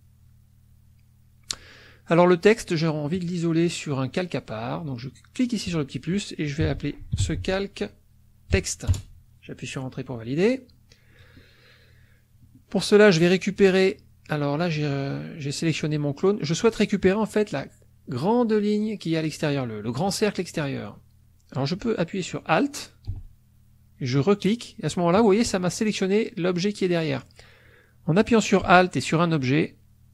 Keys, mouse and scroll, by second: 3.2 click, 5.4 click, 6.4-8.5 typing, 8.9 Return, 13.6 click, 17.2 click, 20.8 click, 24.5 alt+click, 27.1 click, 29.6 alt+click.